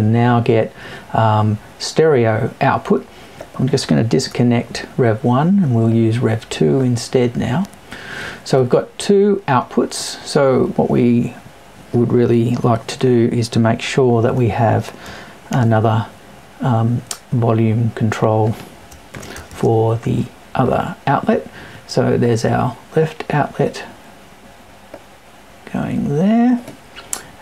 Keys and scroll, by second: 4.2 BackSpace.